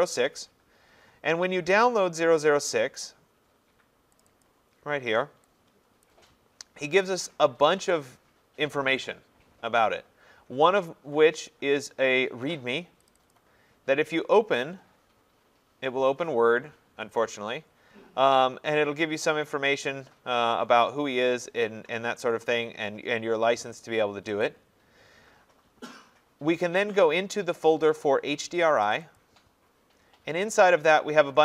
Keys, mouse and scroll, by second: 2.0 click, 4.2 click, 4.4 click, 6.0 click, 13.1 click, 13.3 click, 18.8 scroll, 19.1-20.1 scroll down 9, 20.1-21.2 scroll, 22.1-24.5 scroll, 24.5 click, 28.9 click, 29.2 click.